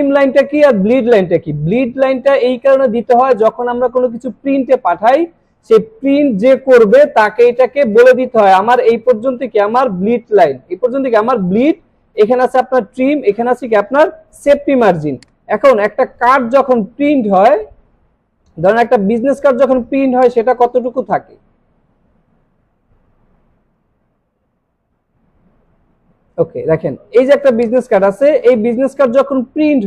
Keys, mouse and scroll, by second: 15.1 click, 16.3 scroll up 1, 18.0 scroll up 1, 19.1 scroll down 1, 19.5 scroll up 1, 20.2 click, 23.8 scroll down 1, 24.9 scroll down 1, 25.4 scroll down 1, 25.7 scroll up 1, 27.6 click.